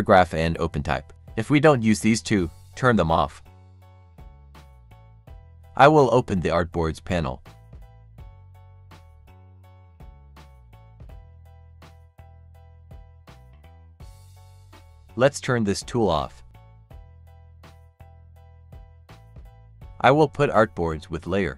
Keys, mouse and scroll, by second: 1.1 right click, 2.0 click, 3.5 right click, 4.1-7.1 drag, 13.7 click, 16.5 right click, 17.9 click, 20.1-21.5 drag.